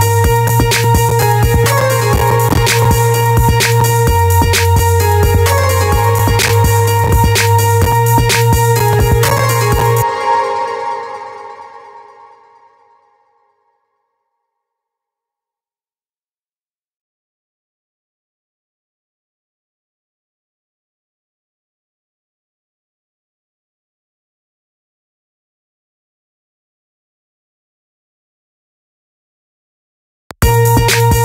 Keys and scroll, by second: 9.6 space, 18.1 ctrl+c, 18.8 ctrl+v, 29.7 space.